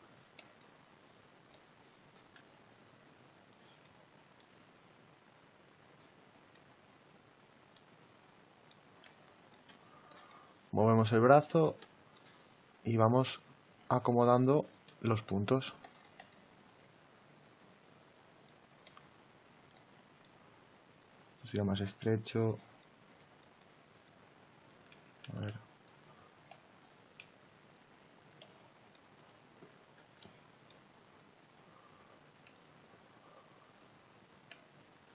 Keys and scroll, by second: 2.4 x, 24.6 ctrl+z, 29.9 x.